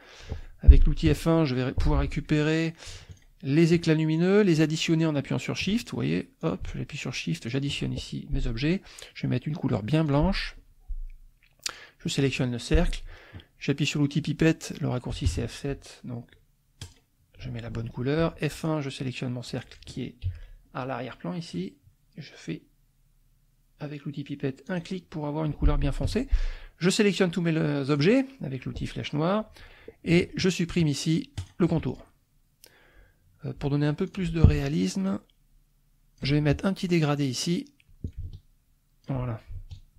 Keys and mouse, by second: 1.1 F1, 2.4 click, 3.1 shift+click, 4.2 shift+click, 5.8 shift+click, 6.4 shift+click, 6.9 shift+click, 7.4 shift+click, 10.0 click, 11.7 click, 15.2 F7, 16.8 click, 18.2 F1, 18.5 click, 20.2 F7, 24.7 click, 26.0 F1, 26.4-28.2 drag, 31.4 shift+click, 31.9 shift+click, 34.1 click, 35.1-36.3 ctrl+shift+drag, 37.0 click, 38.0-39.2 ctrl+drag, 39.7 ctrl+click.